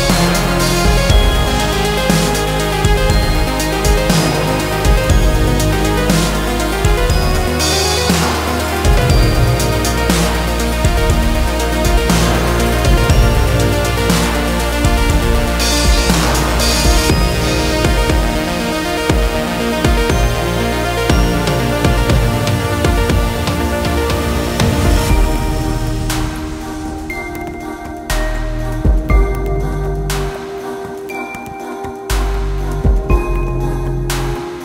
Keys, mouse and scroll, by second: 4.9 click, 5.6 click, 20.6 click, 34.2 click.